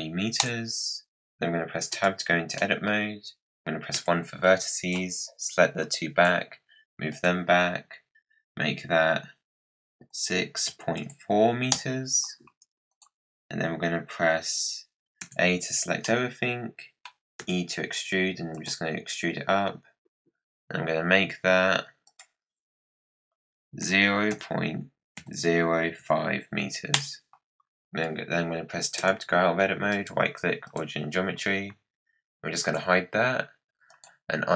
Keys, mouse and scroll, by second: 1.9 Tab, 2.5 middle click, 2.9-3.3 scroll down 1, 3.9 1, 4.4 click, 5.8 click, 7.0-10.2 drag, 12.9 click, 15.2 a, 16.0-17.3 middle drag, 17.3 e, 22.0-25.1 drag, 28.9 Tab, 29.9-32.6 right drag, 32.6 click, 33.8 click.